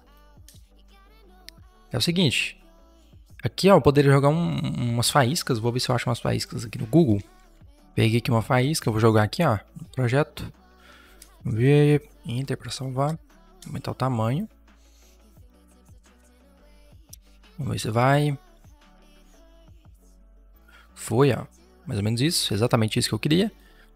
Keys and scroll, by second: 6.9-7.9 typing, 11.1 Return, 12.9 ctrl+t, 16.9 Return, 23.6 Delete.